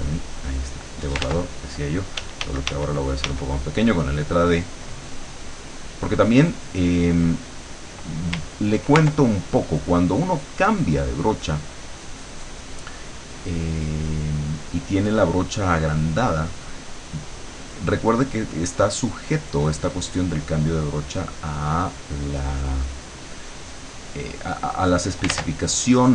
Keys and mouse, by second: 0.4 click, 1.3 ctrl+z, 2.2 d, 3.7-7.7 drag, 9.1-17.3 ctrl+drag, 17.5-21.5 drag, 21.8-24.5 drag, 24.6 click, 25.3 ctrl+z, 25.8-26.1 ctrl+drag.